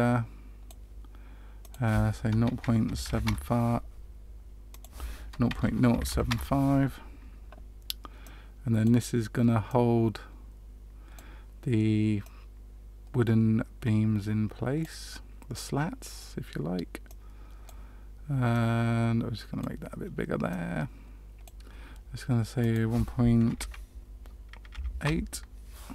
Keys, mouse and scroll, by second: 1.5 click, 6.2 click, 8.2 click, 9.6 click, 12.2 click, 15.1 middle click, 17.0 click, 18.5 click, 20.4 click, 22.5 click.